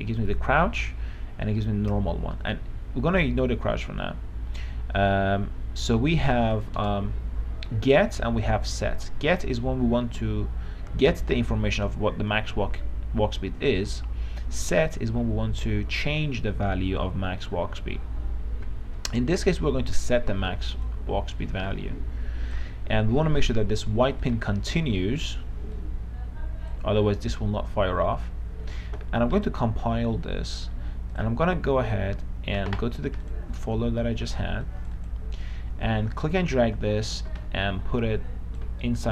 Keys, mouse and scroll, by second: 4.8 space, 6.8 click, 7.0 BackSpace.